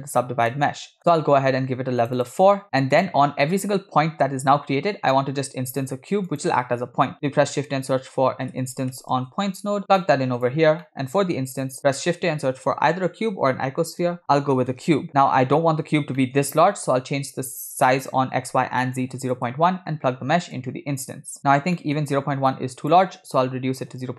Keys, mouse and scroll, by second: 0.5-1.0 middle drag, 1.2-1.6 scroll up 2, 2.1 click, 3.0 drag, 5.1-5.5 middle drag, 5.7 shift+a, 10.9 middle click, 11.3 shift+a, 16.2 middle click, 16.9-19.5 shift+drag, 20.6-21.4 drag, 21.8 middle click, 22.6-24.1 shift+drag.